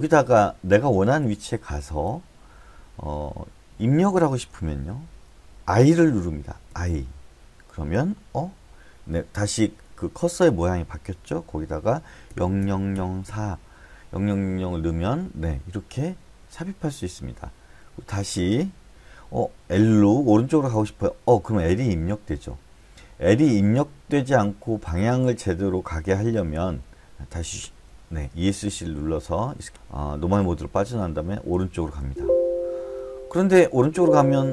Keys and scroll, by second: 0.0-1.7 typing, 4.5 l, 4.8 l, 5.1 l, 6.7 i, 12.3 0, 12.6 0, 12.9 0, 13.2 0, 24.1 BackSpace, 27.6 Escape, 31.5 l, 32.0 l, 33.8 l.